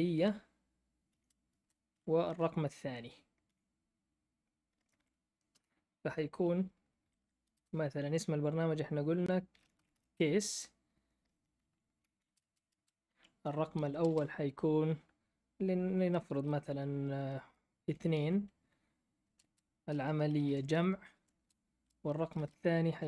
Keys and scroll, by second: 0.0-2.2 typing, 3.4 2, 4.7-5.5 typing, 5.5 Return, 6.8-8.0 typing, 9.2-10.4 typing, 12.0 Left, 12.2-13.9 typing, 13.0 Down, 17.8 2, 19.2 space, 19.4 space, 21.1-22.3 typing.